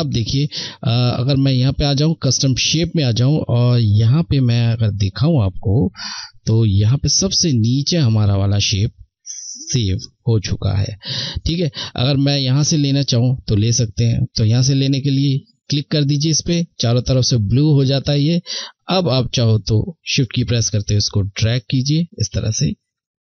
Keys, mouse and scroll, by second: 0.1 click, 14.7 click, 17.6 click, 21.9 ctrl+shift+z.